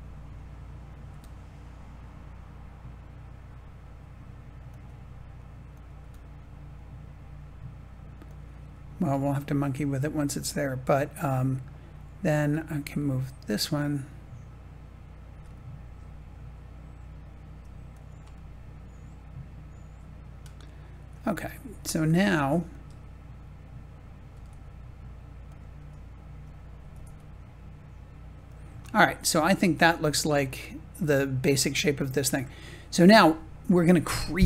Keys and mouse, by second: 1.0 g, 4.6-5.7 drag, 5.9 g, 8.2 click, 9.2-10.9 shift+middle drag, 15.2 g, 17.8 click, 18.4-21.1 middle drag, 22.3 Tab, 24.2 g, 24.4 x, 25.4 click, 25.7 s, 26.7 s, 27.0 x, 28.4 click, 29.3-31.8 middle drag.